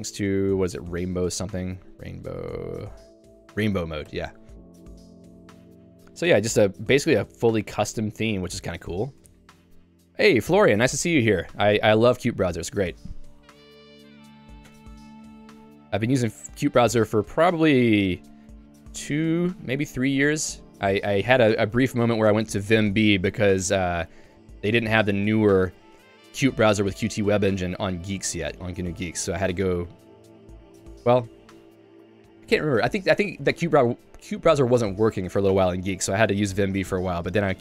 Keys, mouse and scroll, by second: 4.2 ctrl+g, 4.9 ctrl+d, 5.0-7.0 ctrl+d, 14.6 click, 14.7 Escape, 15.2 j, 21.7 Escape.